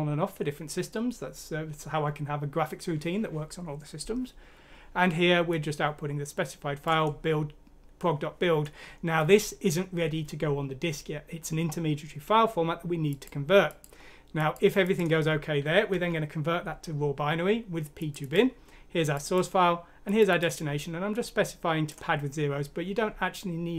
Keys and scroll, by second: 15.9 Home.